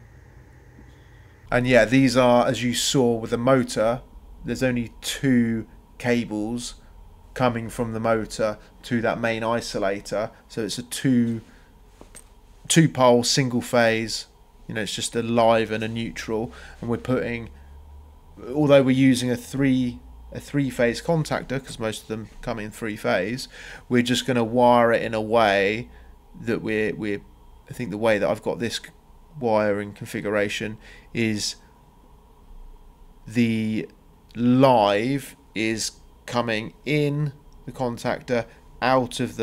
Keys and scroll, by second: 0.0-0.3 typing, 1.0 Escape, 14.3 Escape, 17.0 Escape, 17.7 Escape, 22.6 Delete.